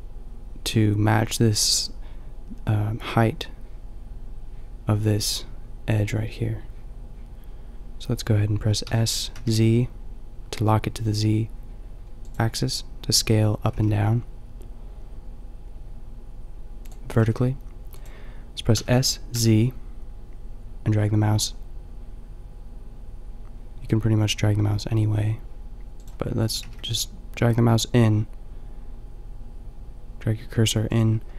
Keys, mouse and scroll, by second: 8.8 s, 13.6 s, 17.2 s, 26.6 s.